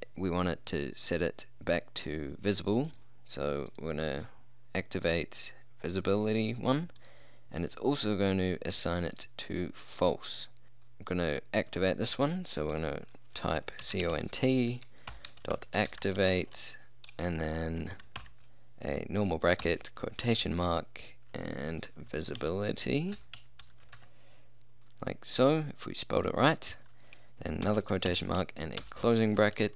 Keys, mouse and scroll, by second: 2.9-5.3 drag, 13.9-16.5 typing, 18.3 shift+9, 19.7 shift+', 21.7-24.0 typing, 27.8 shift+', 28.2 shift+0, 28.7 shift+0, 28.9 Return.